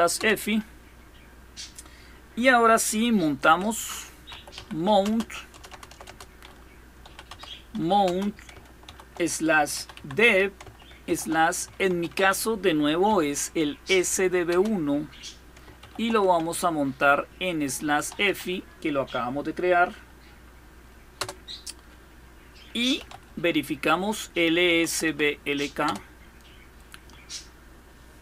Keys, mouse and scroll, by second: 3.2-5.8 typing, 6.8-11.9 typing, 12.9 typing, 14.3 typing, 15.6 typing, 17.6-18.0 typing, 21.0 Return, 22.5-25.6 typing.